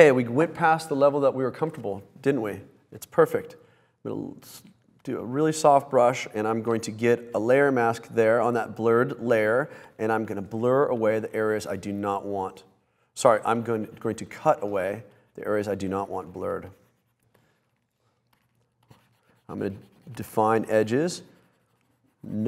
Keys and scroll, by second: 6.5 super+z, 7.1 super+z.